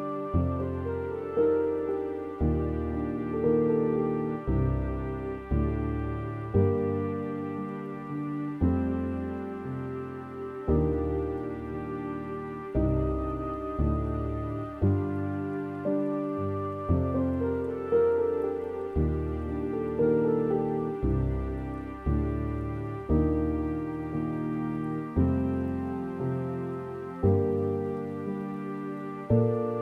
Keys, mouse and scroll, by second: 3.4-3.8 scroll up 2, 11.7 click, 19.4-29.8 drag.